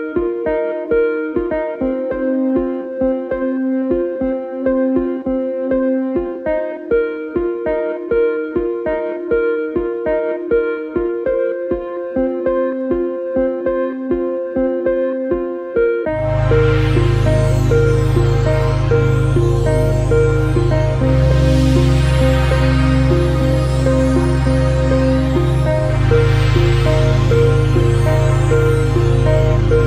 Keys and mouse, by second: 2.1-3.0 drag, 12.1 click, 15.8-16.8 drag, 24.1 click, 25.8 ctrl+shift+click, 29.0 drag, 29.5-29.8 drag.